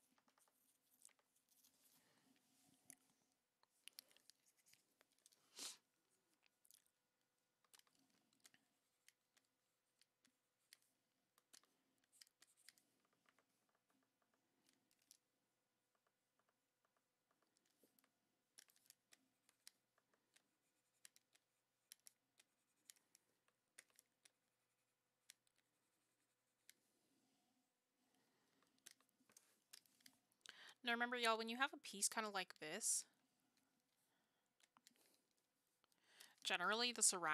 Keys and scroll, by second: 20.0 ctrl+z.